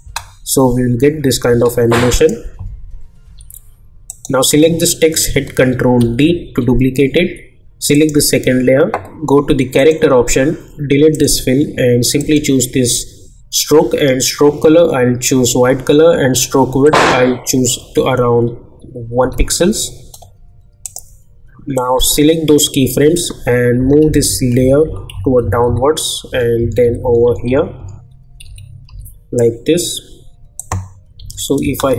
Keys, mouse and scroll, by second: 0.0 space, 2.1 click, 3.2 k, 4.1 click, 6.0 ctrl+d, 7.9 click, 10.6 click, 16.8 click, 20.8-23.4 drag, 23.4 Down, 26.3 Right, 28.4 Up, 30.6 click, 31.2 j, 31.6 space.